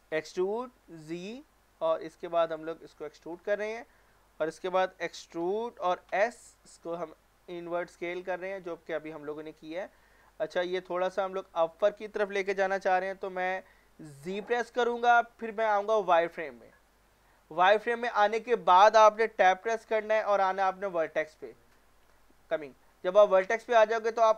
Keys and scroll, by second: 0.1-0.8 typing, 5.4-6.6 typing, 14.3 z, 19.4 Tab.